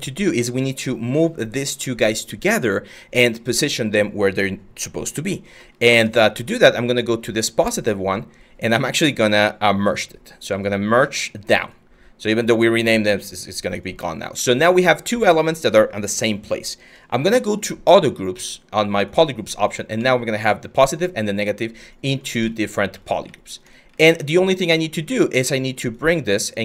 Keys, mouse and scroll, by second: 24.0 w.